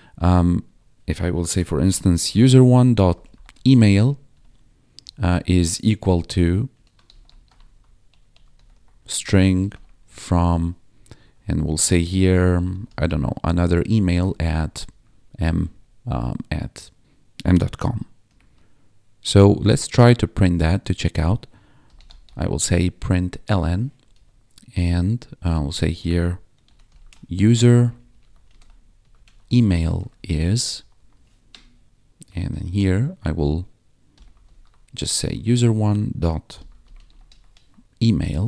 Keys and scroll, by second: 0.6 Tab, 1.4 Return, 1.5-3.9 typing, 4.2 Tab, 4.9 space, 5.1 =, 5.3 space, 6.5-15.6 typing, 18.2 m, 18.5 ., 21.6-22.7 typing, 23.9 Down, 24.1 Tab, 25.6-32.7 typing, 31.3 Right, 33.8-35.1 typing, 36.2-37.7 typing, 38.1 Escape, 38.3 Right.